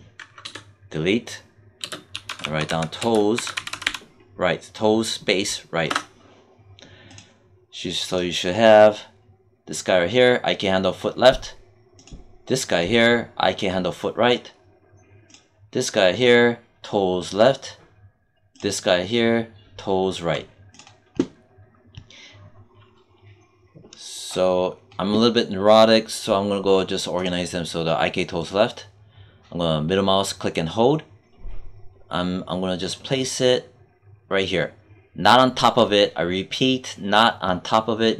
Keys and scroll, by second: 0.3 BackSpace, 1.7 space, 2.0 t, 2.9 space, 3.2 r, 5.7 Return.